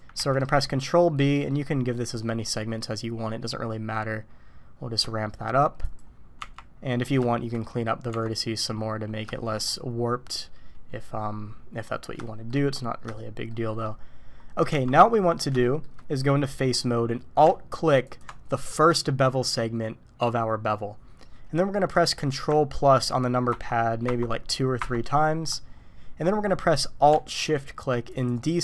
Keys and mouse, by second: 0.2 ctrl+b, 6.4 Tab, 7.3 shift+click, 8.1 Tab, 9.3 shift+click, 12.2 shift+click, 13.1 shift+click, 13.7 shift+click, 14.7 Tab, 15.6 shift+click, 18.0 alt+click, 23.5 ctrl+KP_Add, 24.0 ctrl+KP_Add, 24.8 ctrl+KP_Add, 28.2 alt+shift+click.